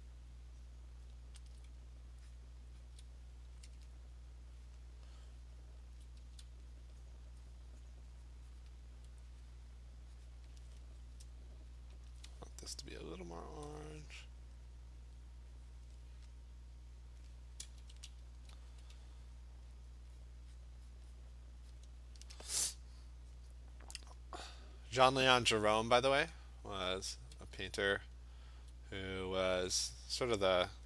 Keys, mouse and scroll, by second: 1.5 alt+click, 1.6 alt+click, 2.4 click, 2.8 click, 6.0 alt+click, 6.2 [, 6.8 click, 7.1 click, 8.7 click, 10.5 click, 12.1 alt+click, 12.2 alt+click, 12.2 alt+right click, 13.6 click, 15.9 click, 17.7 Return, 19.9 click, 20.2 click, 20.6 click, 21.0 click, 21.2 click, 21.8 click, 23.4 click, 23.9 click, 24.2 click, 24.6 click, 24.8 click, 25.0 click, 26.0 ].